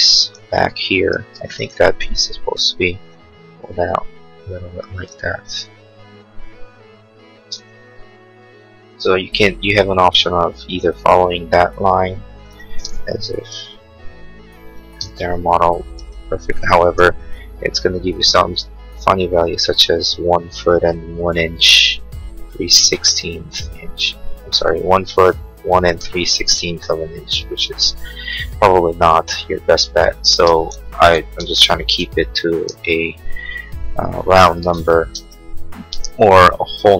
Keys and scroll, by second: 0.6 r, 1.2 space, 7.4 space, 7.7 Escape, 13.2 p, 14.8 space, 17.1 l, 28.8 Escape, 30.3 space, 31.0 ctrl+z, 33.5 Escape, 34.8 ctrl+z, 36.0 p.